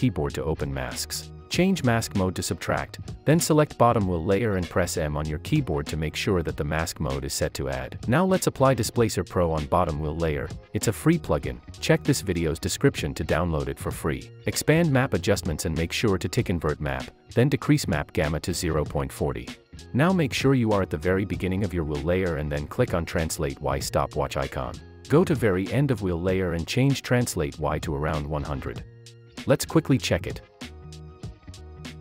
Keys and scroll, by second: 5.2 m.